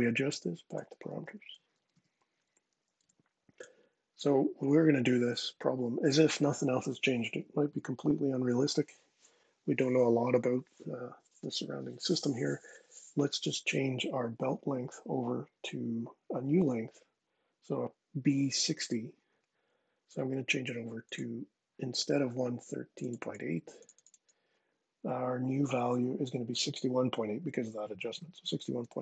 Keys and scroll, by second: 0.5-2.1 typing, 2.4 Down, 2.7 Return, 27.6-29.0 typing.